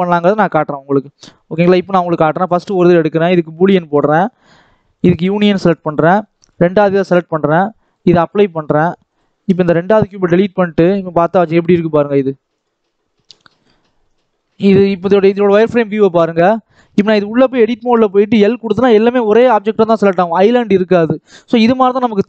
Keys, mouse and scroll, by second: 0.8-1.3 scroll down 4, 1.3 scroll up 2, 2.0 click, 4.0-5.1 drag, 5.5 click, 7.7-9.0 drag, 9.6 x, 10.1-10.7 scroll up 1, 10.7 click, 10.9-12.5 middle drag, 12.5 click, 12.7-14.0 middle drag, 14.0 click, 14.2 middle click, 14.7 click, 14.9 middle click, 15.4 click, 15.7-16.2 scroll up 1, 16.2 Tab, 16.7 alt+a, 18.2 l, 19.5 scroll down 1, 19.7 middle click, 20.1 Tab, 20.8 x, 21.3-21.6 scroll down 1, 21.6 middle click.